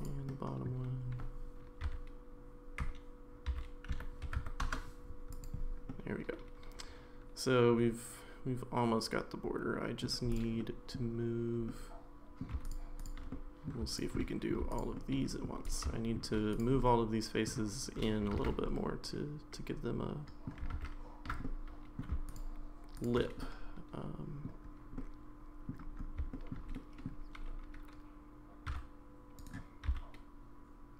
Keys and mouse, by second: 0.0 click, 0.3 middle click, 1.9 e, 3.5 s, 5.3 click, 5.9-10.0 middle drag, 10.6 middle click, 11.7 middle click, 12.6 shift+click, 13.3 middle click, 13.9 shift+click, 14.2 middle click, 14.7 shift+click, 15.0 shift+middle click, 15.6 click, 15.9 shift+middle click, 16.6 click, 16.8 middle click, 18.4 ctrl+z, 18.6-20.5 middle drag, 21.3 ctrl+z, 21.4 middle click, 22.3 click, 23.0 click, 23.4-24.5 middle drag, 25.0 middle click, 26.3 shift+middle click, 26.7 middle click, 28.7 e, 29.9 s.